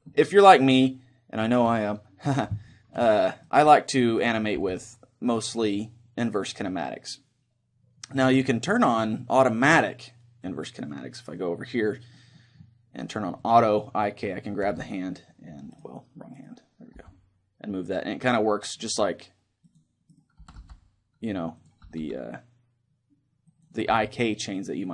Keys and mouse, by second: 2.7-4.5 middle drag, 3.5-7.8 right drag, 4.7 g, 10.5-12.2 drag, 13.5-15.2 drag, 14.7 g, 16.0-18.2 right drag, 17.1 g, 19.9 click, 20.2 right click, 20.4 g, 21.6-24.9 drag, 22.1 r, 23.9 g.